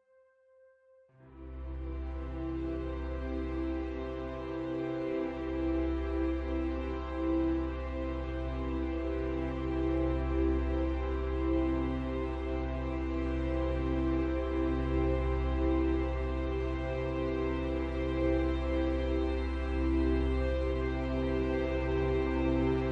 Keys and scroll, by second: 20.5 ctrl+z.